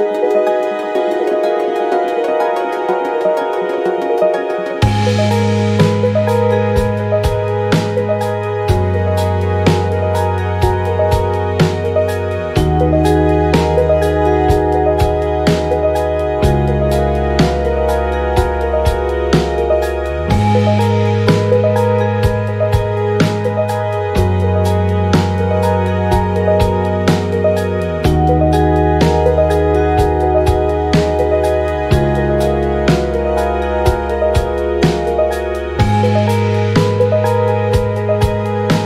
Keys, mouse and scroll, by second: 1.6 click, 2.4 click, 3.8 click, 4.4 click, 5.0 click, 5.8 click, 8.1-9.7 drag, 10.8 shift+click, 12.7 click, 14.8 ctrl+shift+click, 16.5-17.9 drag, 18.5 ctrl+scroll up 2, 19.8 click, 20.5-21.8 shift+drag, 23.0 ctrl+g, 23.9 click, 25.7 click, 27.1-28.8 ctrl+drag, 30.4 ctrl+d, 31.7 click, 32.9 ctrl+scroll up 2, 33.5 ctrl+click, 35.0 ctrl+click, 36.6 click, 37.9 ctrl+d.